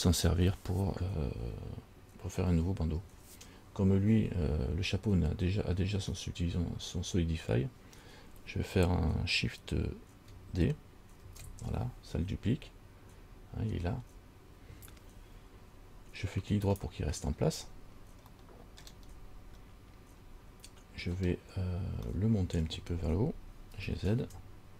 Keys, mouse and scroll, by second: 11.5 shift+d, 18.6 middle click, 19.3-19.9 scroll up 2, 21.6 scroll down 1, 22.3 middle click, 24.1 g.